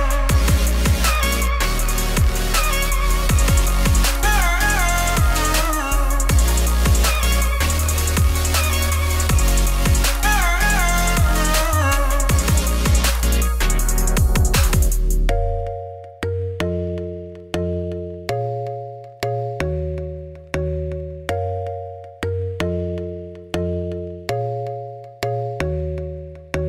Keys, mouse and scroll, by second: 0.2 g, 1.1 Tab, 1.2 click, 1.6 r, 2.3-3.5 drag, 3.5 r, 4.1 scroll down 2, 4.3 scroll up 1, 4.4 shift+click, 5.3 shift+click, 5.6 shift+click, 6.0 ctrl+p, 6.8 scroll down 1, 7.0 click, 7.2 middle click, 7.5-7.9 scroll down 1, 7.9 click, 8.1 click, 8.5 s, 9.0 scroll up 2, 9.1 middle click, 9.4 r, 10.4 ], 10.5 ], 10.8 alt+d, 11.4 r, 12.4 scroll up 1, 12.5 middle click, 12.5 scroll down 2, 12.8-13.9 drag, 13.9 alt+d, 14.6 r, 16.5 click, 17.1 alt+d, 19.5-19.9 scroll up 4, 19.9 click, 20.1 click, 20.8 g, 21.1-21.4 scroll down 1, 21.4 alt+d, 22.0 x, 22.2-22.6 scroll up 1, 22.6 shift+click, 23.0 scroll down 2, 23.2 ], 23.5 alt+d, 24.1 r, 25.0 g.